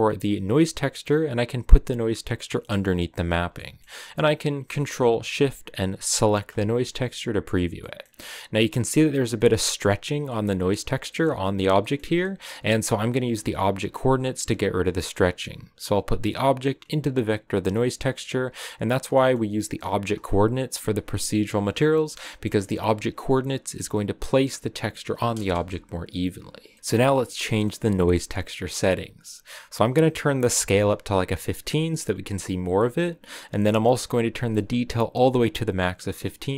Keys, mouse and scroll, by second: 6.1 ctrl+shift+click, 7.7 middle click, 8.0-9.3 scroll up 6, 9.3-12.7 middle drag, 12.7-14.3 drag, 14.3-15.7 middle drag, 15.7-18.2 drag, 18.9-20.1 middle drag, 20.1-23.6 drag, 23.6-24.7 scroll down 1, 24.7-25.2 scroll down 1, 25.5 KP_0, 31.2 click, 35.0-36.1 drag, 36.1 scroll up 1.